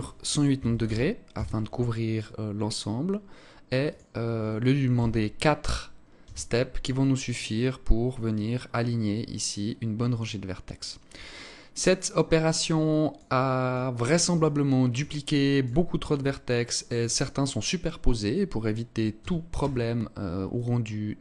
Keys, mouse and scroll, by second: 3.3 click, 10.7 alt+click, 12.3 alt+click, 12.9 alt+click, 13.9 alt+click, 14.8 alt+click, 15.5-16.3 scroll up 2, 18.6 a, 19.0 a, 19.9 alt+click.